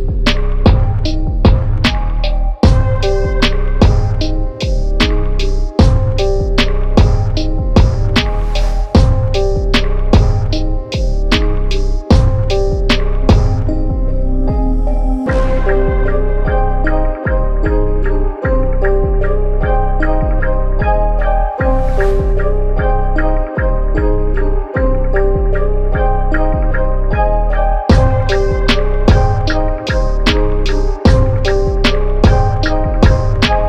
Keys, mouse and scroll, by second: 1.7 click, 3.0-5.5 typing, 6.3 click, 8.5 alt+BackSpace, 9.5 a, 10.3 click, 12.0 ctrl+d, 12.1-12.8 typing, 15.5 Return, 17.2 click, 19.7 click, 21.0-23.3 typing, 23.6 click, 24.4 right click, 25.8 click, 33.0 right click.